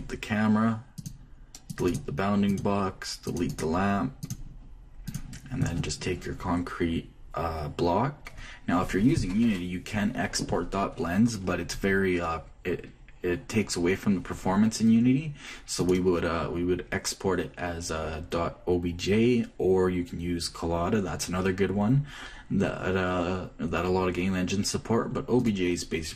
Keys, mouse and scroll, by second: 0.3-2.1 drag, 0.6-2.2 right drag, 2.2 middle click, 2.5-7.6 drag, 2.6-6.0 right drag, 16.5-18.4 drag.